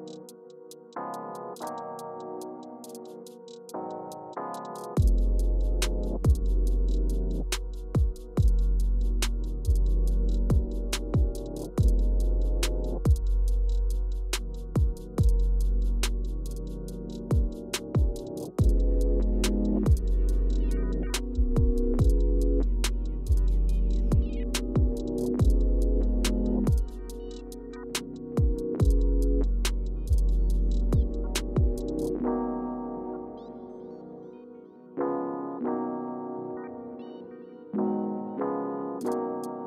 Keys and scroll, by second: 8.2 Page_Down, 11.5 Return, 14.1 Return, 16.0 Page_Down, 16.9 Page_Up, 17.1 Page_Up, 19.3 Page_Down, 19.8 Page_Up, 20.6 Page_Down, 22.2 Page_Up, 22.5 Page_Down, 24.1 Return.